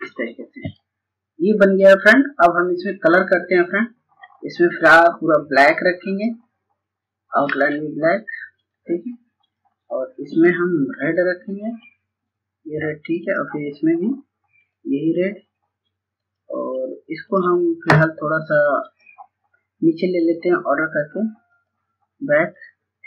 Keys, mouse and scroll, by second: 0.2 click, 6.6 right click, 7.7-23.0 drag.